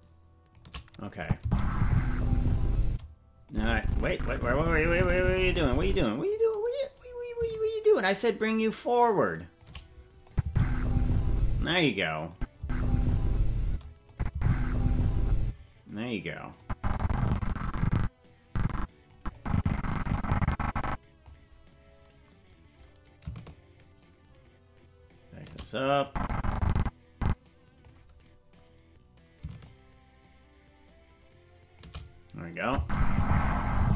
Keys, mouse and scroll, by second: 1.2 click, 1.4 space, 2.8 space, 3.5-6.3 drag, 7.6-9.6 shift+drag, 10.3 click, 10.4 space, 11.5 space, 12.3 click, 12.6 space, 13.6 space, 14.1 click, 14.3 space, 15.4 space, 16.6-19.1 drag, 19.3-21.3 drag, 23.5-25.5 shift+drag, 26.0-27.9 drag, 29.6-31.8 shift+drag, 32.6-33.9 drag, 32.7 space.